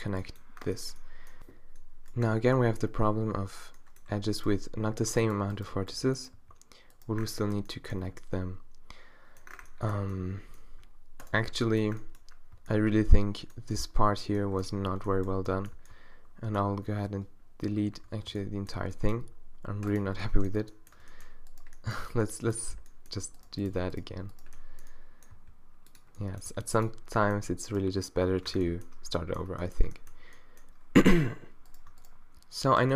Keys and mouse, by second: 4.8 g, 5.7 g, 6.4 g, 11.2-14.7 drag, 12.5 b, 14.8 z, 15.7 b, 17.9-19.1 drag, 18.3 b, 19.2 x, 22.0 g, 22.7-24.5 middle drag, 25.4 g, 26.5 g, 27.7-29.0 middle drag, 28.5 Tab, 29.0 Tab.